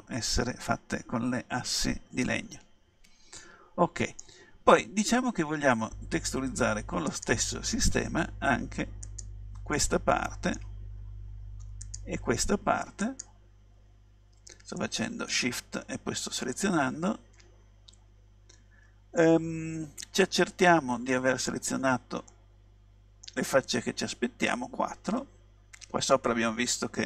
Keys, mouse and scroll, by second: 2.1-3.5 middle drag, 7.1-8.9 right drag, 9.1 right click, 9.8 middle click, 10.4 right click, 10.8 middle click, 11.9-14.8 right drag, 14.8-16.8 middle drag, 22.3-24.1 middle drag.